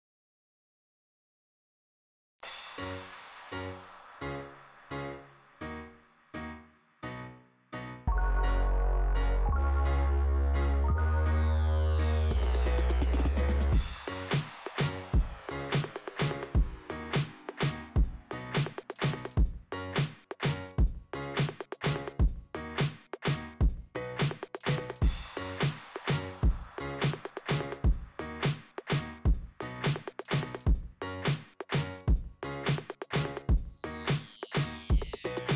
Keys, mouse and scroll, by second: 2.3 click, 3.0 click, 3.8 click, 6.0 click, 7.5 click, 12.0 click, 13.6 click, 14.1 click, 15.8 click, 18.5 click, 19.9 click, 23.2 click, 24.3 click, 27.9 click, 30.4 scroll up 1, 30.6 right click, 30.9 right click, 32.3 click, 33.7 click, 34.6 click, 35.3 click.